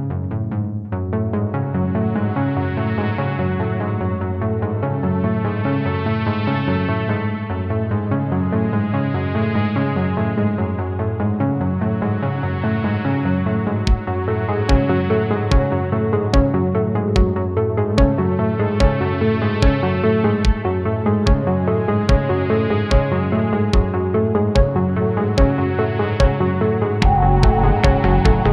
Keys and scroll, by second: 1.7 ., 8.7-10.0 typing, 10.1 Return, 11.6 ., 16.7 ;, 17.8 t, 27.7 ..